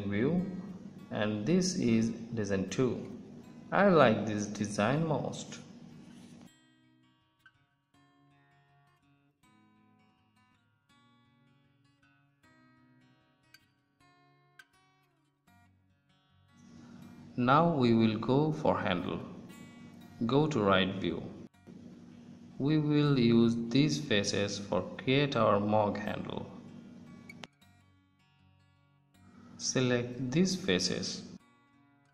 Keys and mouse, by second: 2.8 ctrl+s, 11.2 Tab, 13.8 Tab, 15.0 Tab, 17.8 KP_1, 20.4 KP_3, 21.9-27.2 drag, 29.5-32.1 drag.